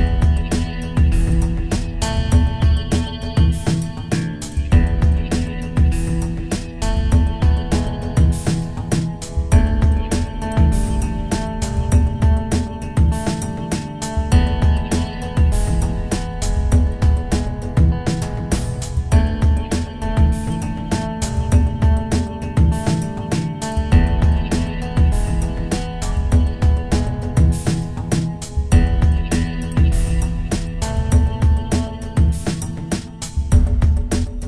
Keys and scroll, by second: 9.3 ctrl+i.